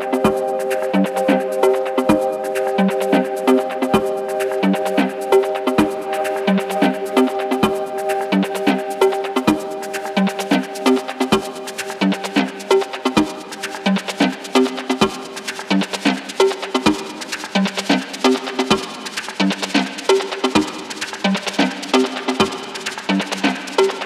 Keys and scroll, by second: 6.7-14.3 typing, 16.3-18.7 typing, 20.5 Up, 22.1 g, 22.3 g, 22.8 ctrl+c, 23.1 ctrl+v, 23.1 g, 23.6 ctrl+v, 23.8 g.